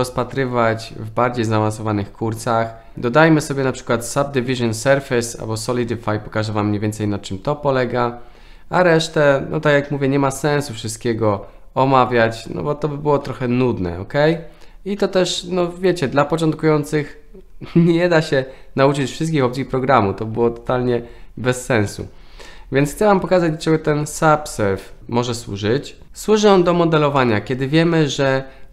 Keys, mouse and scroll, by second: 22.4-23.1 shift+middle drag, 27.1-28.7 middle drag.